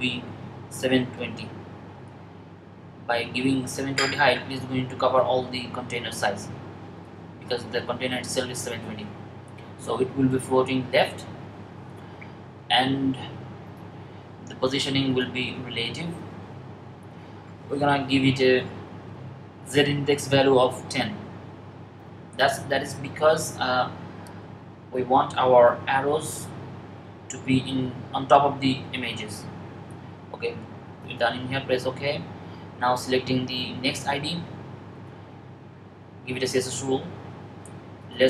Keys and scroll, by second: 3.1-3.8 typing, 19.7-20.7 typing.